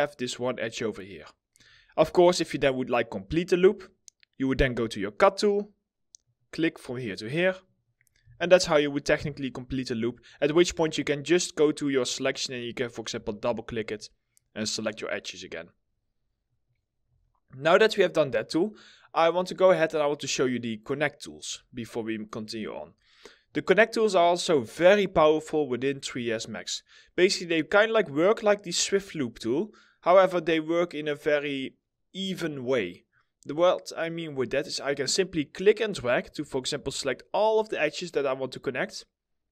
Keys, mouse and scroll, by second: 1.7 alt+middle click, 1.7 scroll up 1, 2.1 alt+middle click, 7.9 right click, 8.2 w, 9.2 2, 10.3 double click, 10.6 scroll down 1, 12.2 double click, 16.5 middle click, 16.9 scroll up 1, 17.3 alt+middle click, 18.5 middle click, 21.4 scroll down 1, 21.8 alt+middle click, 33.1 middle click, 36.7 alt+middle click.